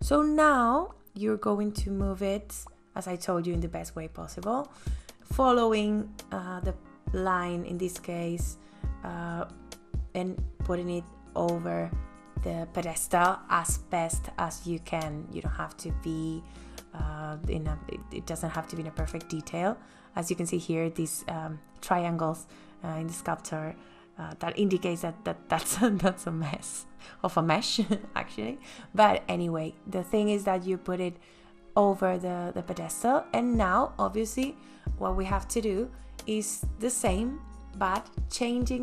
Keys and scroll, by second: 29.0 space.